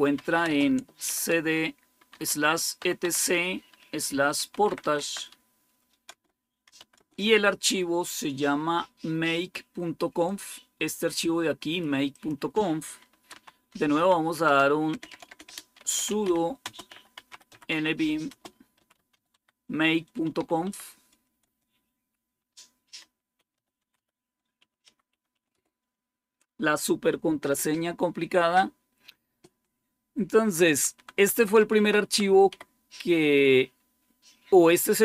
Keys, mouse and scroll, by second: 0.0-0.9 typing, 2.0-5.2 typing, 6.0 Return, 6.3-7.0 typing, 8.5-9.2 typing, 10.1-11.7 drag, 12.0 click, 12.8-21.3 typing, 22.7-25.7 typing, 27.7-28.4 typing, 30.1-30.8 typing, 31.0 Down, 32.4 Up, 32.4 Down.